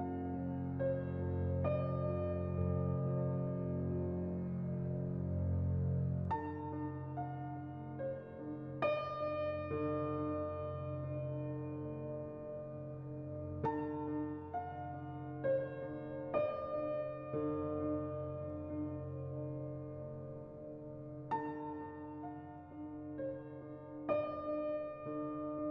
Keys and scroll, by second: 3.9 2, 12.5 1, 18.3 5.